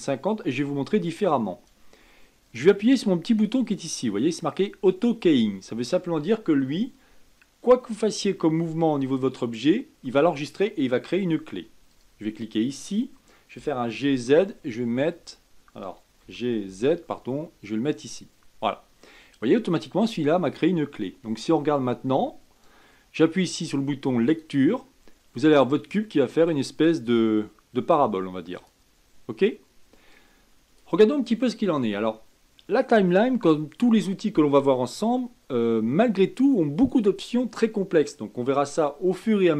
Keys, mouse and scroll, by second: 0.0-3.1 drag, 11.9 click, 13.5 g, 14.0 z, 16.2 g, 20.5-23.6 drag, 24.3 click, 28.5-33.2 drag.